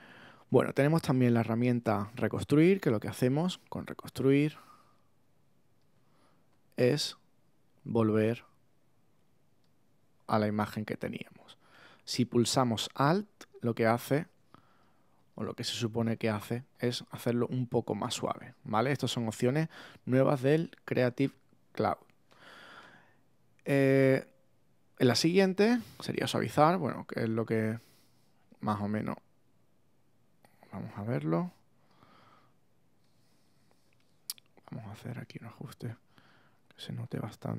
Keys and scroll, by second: 14.2 alt+super+z, 14.9 super+z, 18.2 alt+super+z, 18.8 super+z, 21.1 alt+super+z, 22.5 super+z.